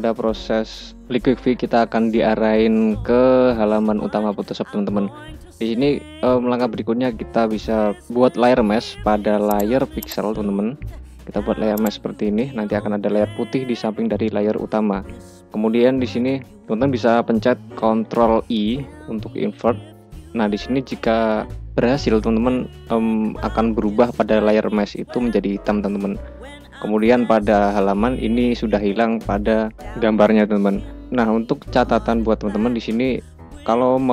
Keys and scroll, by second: 18.1 ctrl+i.